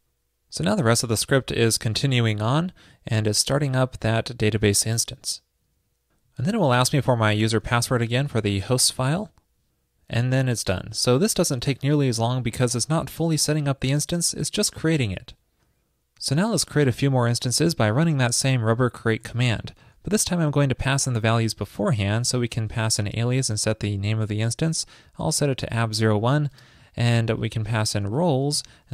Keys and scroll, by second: 19.2 ctrl+a.